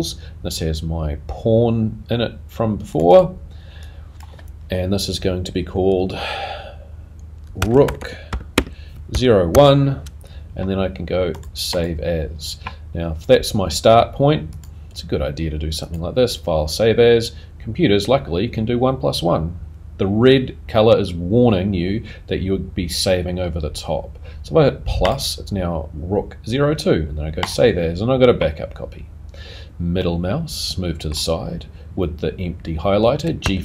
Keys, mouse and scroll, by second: 14.5 click, 30.0 middle click, 33.4 g.